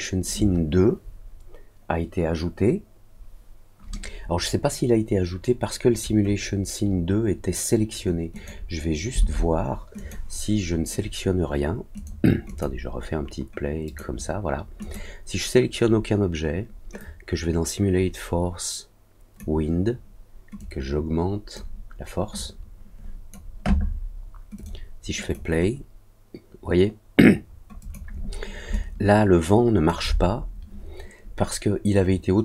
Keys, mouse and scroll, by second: 8.3 click, 9.9 click, 11.9 click, 12.4 click, 13.8 click, 14.7 click, 16.9-19.3 drag, 20.5 click, 22.3 click, 24.5 click, 25.2 click, 27.7 click, 28.7-29.8 alt+drag.